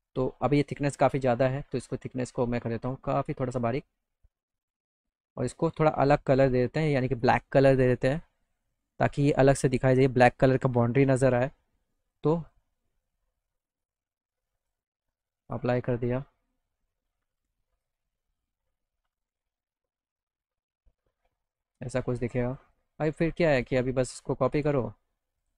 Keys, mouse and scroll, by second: 0.8 middle click, 2.7 click, 6.7 click, 8.1 click, 10.8 click, 12.0 click, 12.4 click, 13.8 click, 14.6 click, 15.5 click, 15.9 middle click, 16.2 alt+middle click, 16.3 alt+click, 16.5 alt+middle click, 18.0 click, 22.2 middle click, 22.6 click, 23.5 alt+click.